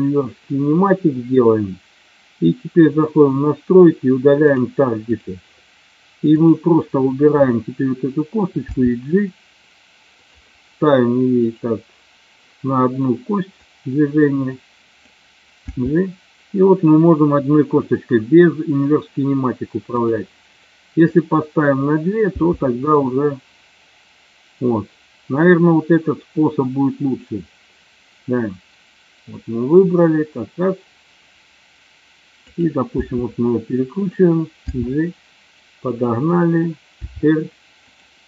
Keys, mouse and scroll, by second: 2.9 click, 8.8 g, 10.3 click, 11.6 click, 13.7-15.2 drag, 15.7 g, 21.2 click, 22.4 g, 33.0 r, 34.0 click, 34.8 g, 37.2 r, 37.9 click.